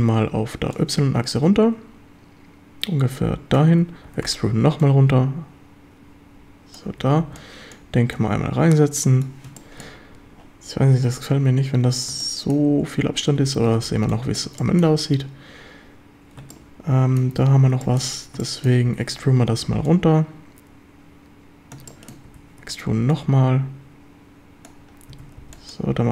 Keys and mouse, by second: 0.8-3.5 drag, 4.1 e, 4.3 Escape, 4.9-6.8 drag, 6.9 a, 7.2 b, 8.2-9.2 drag, 9.6 shift+middle click, 9.8 click, 12.2 shift+click, 13.4 a, 13.7 b, 14.6 shift+click, 16.5-17.3 shift+drag, 17.9 shift+click, 18.4 shift+drag, 18.9 e, 19.1 Escape, 19.9-21.8 drag, 21.9 click, 22.6 Escape, 23.2-24.7 drag, 25.1 a, 25.4 b.